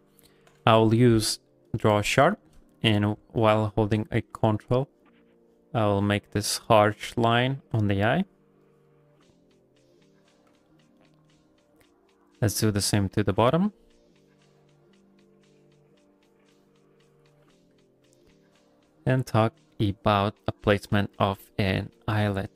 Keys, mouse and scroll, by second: 0.4 q, 2.0 f, 2.4 shift+middle click, 2.8 ctrl+middle click, 3.0 f, 3.4 middle click, 3.7 shift+middle click, 4.1 middle click, 4.3 f, 4.9 ctrl+click, 6.4 ctrl+click, 7.1 ctrl+click, 7.8 middle click, 8.2 ctrl+click, 10.7 middle click, 11.0 shift+middle click, 11.3 middle click, 12.0 ctrl+click, 13.3 ctrl+click, 13.7-17.7 ctrl+click, 17.8 middle click, 18.5 ctrl+click, 19.2 middle click, 20.0 shift+click, 21.2 ctrl+middle click, 21.4 middle click, 21.8 f, 22.2 shift+click.